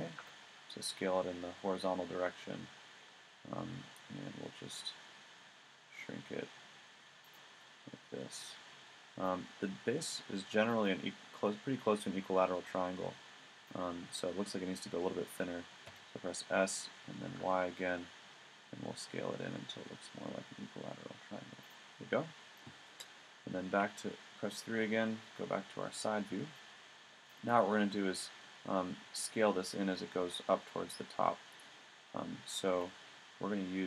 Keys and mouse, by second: 7.6 middle click, 9.5 middle click, 15.8 s, 21.7 middle click, 23.5 middle click, 23.8 KP_3, 27.3-28.3 middle drag, 32.7 a.